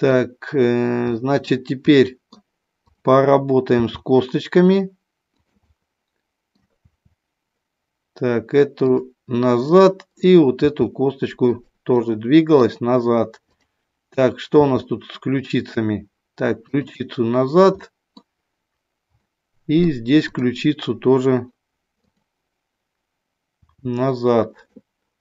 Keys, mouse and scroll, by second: 1.0 middle click, 2.0 middle click, 3.7 r, 5.4 click, 5.7 middle click, 6.8 r, 9.7 click, 10.7 r, 11.4 click, 11.9 middle click, 13.4 click, 14.5 r, 16.6 click, 17.8 middle click, 19.2 middle click, 20.2 click, 22.0 click, 23.5 r, 24.5 click.